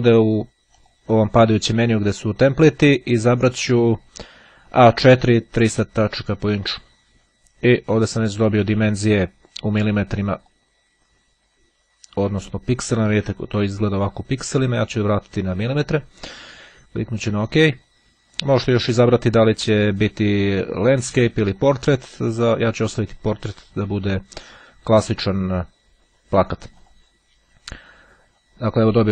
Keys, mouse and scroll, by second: 0.6 click, 5.6-7.3 drag, 10.3 click, 12.4 click, 15.2 click, 16.0 click, 20.0 click, 21.0 click, 24.3-27.6 drag.